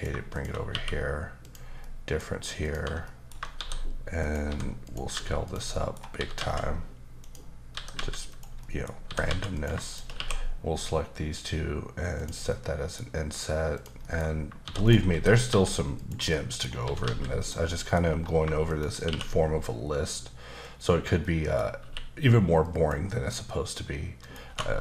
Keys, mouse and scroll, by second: 0.3 shift+click, 0.7 q, 1.4 click, 1.8 middle click, 2.6 click, 3.0 middle click, 3.5 shift+d, 4.2 click, 4.4 s, 4.8 click, 5.1 g, 5.5 click, 5.7 middle click, 6.2 typing, 7.2 click, 7.7 typing, 8.3 click, 8.6 middle click, 9.0-10.1 typing, 9.5 click, 9.9 click, 12.1 click, 12.5 middle click, 13.7 click, 14.0 middle click, 14.6 shift+d, 14.8 right click, 15.5 s, 16.0 click, 16.3 middle click, 16.8 typing, 17.4 click, 17.6 middle click, 18.6 shift+click, 19.0 q, 20.6 click, 21.2 middle click, 21.6 scroll up 2, 22.6 click, 24.2 click, 24.5 typing.